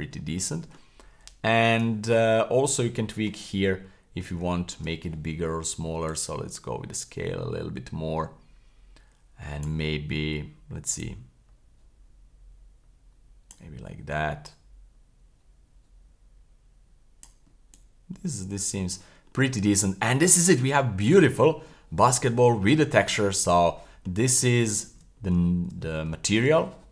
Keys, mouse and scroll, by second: 0.2-0.8 middle drag, 1.3-2.3 scroll down 1, 2.3-4.3 scroll up 11, 3.1 shift+middle click, 4.5 shift+middle click, 6.1-9.7 drag, 11.0-13.5 drag, 14.5-17.3 drag, 17.7 click, 19.2-19.9 scroll down 4, 19.9-20.2 middle drag, 20.6-20.9 scroll down 2, 20.9 middle click, 21.2-21.7 scroll up 3, 21.7-22.3 middle drag, 22.5-22.8 scroll down 1, 22.8 scroll up 1, 22.9 middle click, 23.5 scroll down 1, 24.0-24.5 scroll down 3, 24.7 shift+middle click, 25.0 scroll down 2, 25.5 shift+middle click, 25.7 scroll down 1, 26.1 shift+middle click.